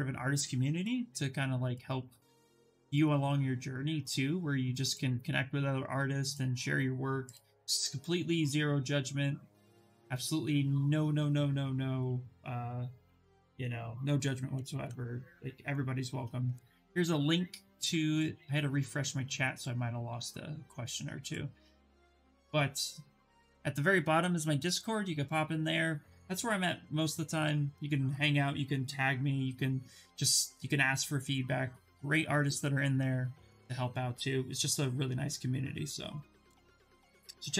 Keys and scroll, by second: 14.4 ctrl+v, 16.0 Return.